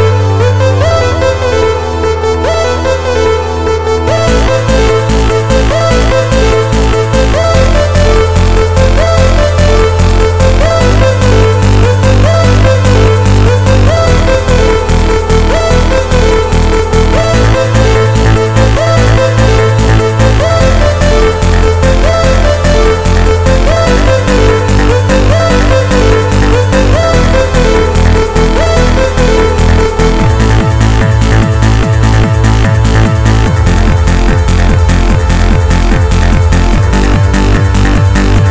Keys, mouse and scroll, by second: 0.7 click, 1.9 g, 2.7 click, 9.3 click, 11.5 click, 17.7 click, 19.6 KP_1, 21.2 n, 27.0 middle click, 32.5 click, 37.9 click.